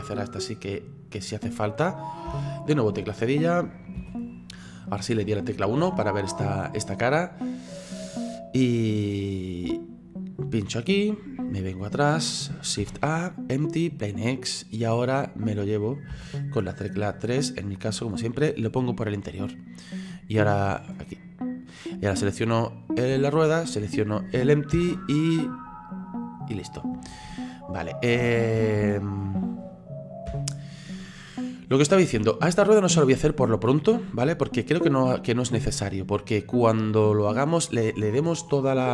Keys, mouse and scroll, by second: 0.2 right click, 0.7-1.3 scroll down 3, 1.3 scroll up 2, 2.3 /, 4.0 KP_1, 5.6-7.6 scroll up 6, 7.6-9.8 drag, 11.5-11.9 scroll down 7, 12.8 shift+a, 14.1-16.1 middle drag, 16.1 KP_3, 17.1 click, 18.2-22.1 drag, 22.1 right click, 23.4 shift+right click, 24.7 ctrl+p, 26.6-27.1 middle drag, 27.1-27.6 scroll down 4, 27.8 scroll up 2, 30.3 /, 30.7-31.2 scroll down 3, 31.2-38.9 middle drag.